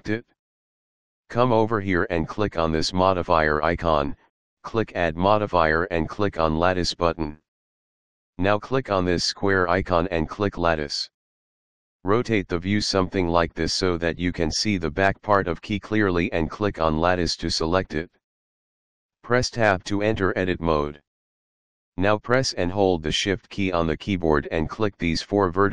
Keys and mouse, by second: 2.2 click, 6.7 click, 8.6 click, 9.7 click, 11.7 middle click, 13.2 middle click, 15.0 shift+middle click, 17.8 click, 18.5 Tab, 21.3 click, 23.0 shift+click, 24.9 shift+click.